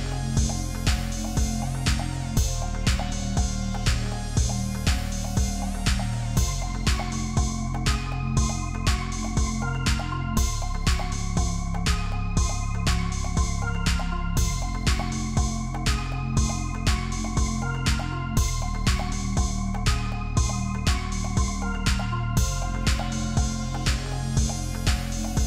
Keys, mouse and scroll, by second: 4.3 ctrl+t, 5.7 ctrl+t, 6.4 shift+click, 7.3 shift+click, 9.0 alt+scroll up 1, 9.6 alt+scroll down 1, 10.1-10.9 alt+scroll, 11.1 Delete, 13.0 typing, 14.9 double click, 17.2 right click, 22.2 double click.